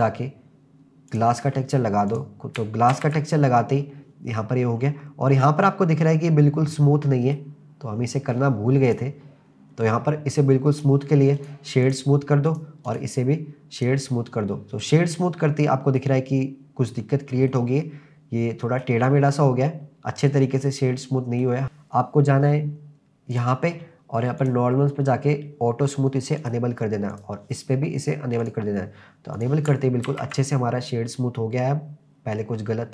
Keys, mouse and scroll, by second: 2.1 click, 2.9 ctrl+s, 4.3-5.1 scroll up 4, 5.5 scroll up 2, 6.8-7.4 middle drag, 7.9-8.7 scroll up 3, 8.9 click, 9.5-10.7 scroll down 4, 10.7 click, 11.4-12.6 drag, 11.4 right click, 12.9-13.9 drag, 12.9 right click, 14.5-14.9 scroll up 1, 14.9-16.0 middle drag, 16.9-17.5 scroll down 1, 17.5-19.9 middle drag, 20.2-20.6 scroll down 1, 20.6-21.4 middle drag, 21.6 click, 23.3 click, 24.4 click, 26.4 click, 27.1 click, 28.4 click, 29.3 click, 30.1 ctrl+s, 30.5-32.9 middle drag.